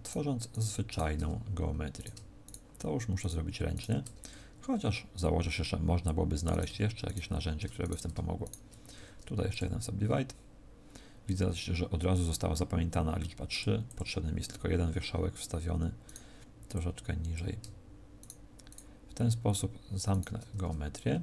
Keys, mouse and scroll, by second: 0.4 right click, 1.2 f, 1.8 right click, 2.4 shift+right click, 3.1 right click, 3.8 shift+right click, 4.2 f, 6.4 right click, 7.0 shift+right click, 7.7 right click, 8.3 shift+right click, 8.8 w, 13.4 click, 13.8 click, 16.0 right click, 16.6 click, 18.1 shift+right click, 18.6 shift+right click, 20.4 f, 20.9-21.2 scroll up 2.